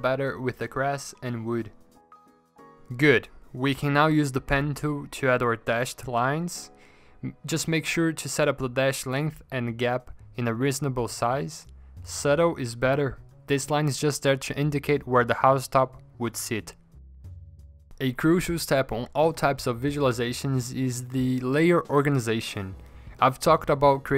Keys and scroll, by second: 1.0 shift+Return, 3.4 End, 4.0 Down, 4.0 Insert, 4.5-8.6 typing, 9.6-11.2 typing, 17.0 v, 19.6 ctrl+z.